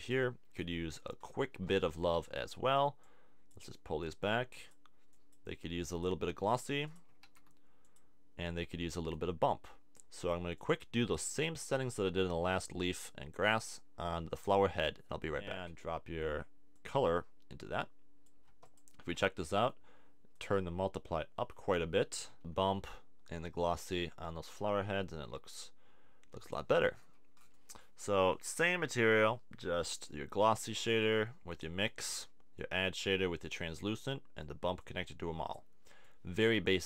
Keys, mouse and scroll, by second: 7.3 shift+d, 21.8-25.5 middle drag, 25.5 click, 25.9-27.1 right drag, 27.1-28.3 middle drag, 31.2 click, 33.6 click.